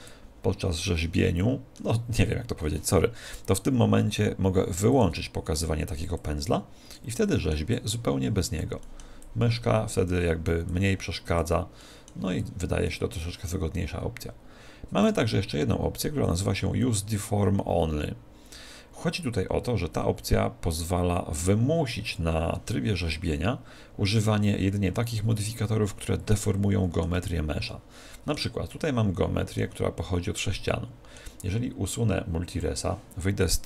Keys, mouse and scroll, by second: 1.8 click, 4.9-14.1 drag, 7.1-13.5 middle drag, 14.9 click, 26.3-31.7 middle drag, 27.1 Tab, 32.5-33.6 drag.